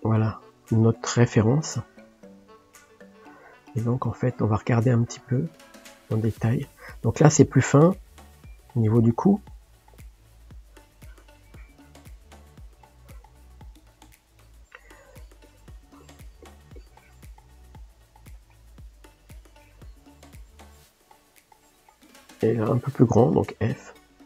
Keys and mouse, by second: 0.0 click, 7.9-10.2 middle drag, 10.2-12.0 drag, 12.0 middle click, 12.7-13.7 drag, 13.7-15.4 middle drag, 15.4-17.5 drag, 17.5-19.0 shift+middle drag, 19.0-20.1 drag, 20.1-21.1 middle drag, 21.1 click, 21.9-23.3 shift+middle drag, 23.3 f, 24.0-24.2 drag.